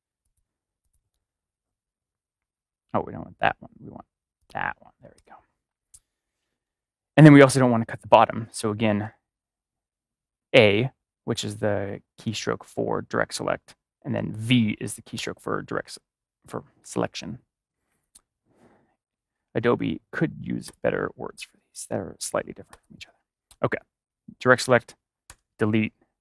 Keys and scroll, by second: 5.1 BackSpace, 8.9 a, 15.1 v, 25.2 BackSpace.